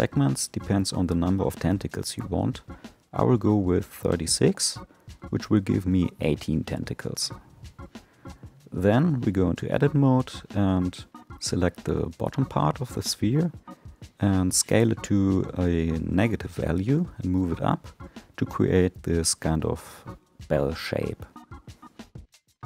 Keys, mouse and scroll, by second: 0.1-4.0 drag, 4.4-5.2 middle drag, 7.0 Tab, 7.8-9.4 scroll up 3, 9.4-10.7 drag, 10.7 3, 11.3 click, 13.7 s, 17.0 g, 18.6-19.0 scroll up 4, 19.6 s.